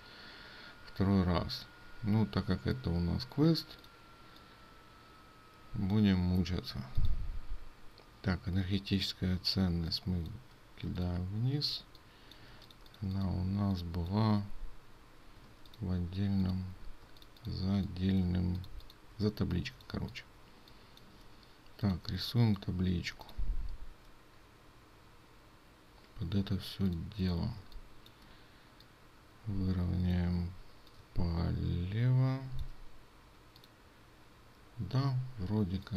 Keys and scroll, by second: 10.9 ctrl+space, 15.5 ctrl+space.